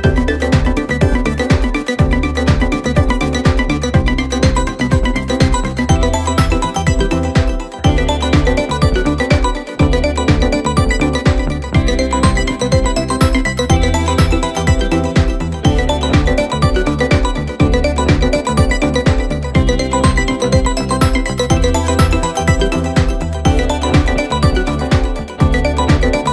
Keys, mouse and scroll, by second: 1.3-3.4 drag, 3.4-6.1 middle drag, 6.1-6.9 scroll down 3, 6.9 KP_Divide, 9.4 KP_7, 10.6-11.8 scroll up 6, 11.8 s, 13.5 s, 17.5 scroll down 1, 17.7-18.3 middle drag, 18.3-19.7 scroll down 1, 19.7 KP_7, 20.4-21.2 scroll up 2, 21.2-23.3 right drag, 23.3-23.6 scroll up 1, 23.6-23.9 scroll down 1, 23.9-25.6 middle drag, 25.6 KP_1.